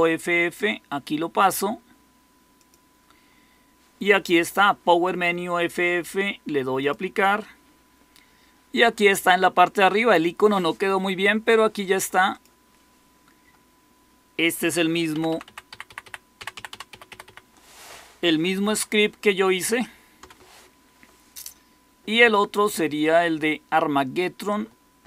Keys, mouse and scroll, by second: 15.1 Down, 15.2 Down, 15.4 Down, 15.6 Up, 15.8 Up, 15.9 Up, 16.3 Down, 16.5 Down, 16.6 Down, 16.8 Up, 17.0 Up, 17.2 Up, 20.1 Escape.